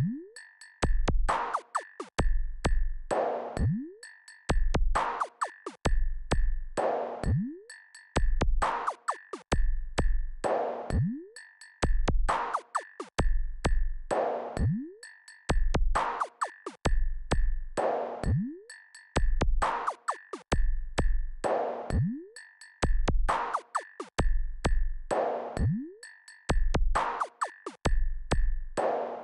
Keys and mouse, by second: 3.6 click, 14.8-21.5 drag, 26.8 click.